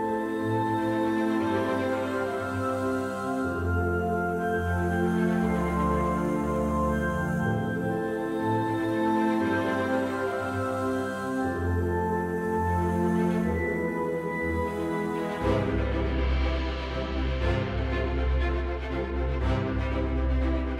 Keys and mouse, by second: 1.2-1.9 middle drag, 3.9 right click, 7.1 g, 7.6 z, 9.2 middle click, 9.7 KP_1, 11.1-11.4 middle drag, 11.7 shift+a, 14.4 s, 14.8 KP_3, 14.9 KP_0, 15.8 KP_Enter.